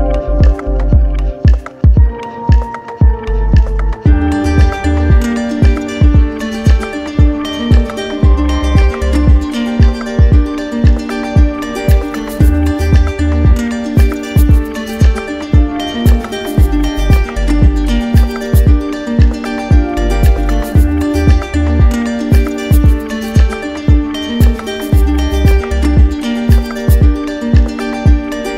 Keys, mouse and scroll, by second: 0.4 alt+click, 6.7 click, 16.2-17.2 drag, 18.0-19.0 typing, 19.4 Return, 23.2 click.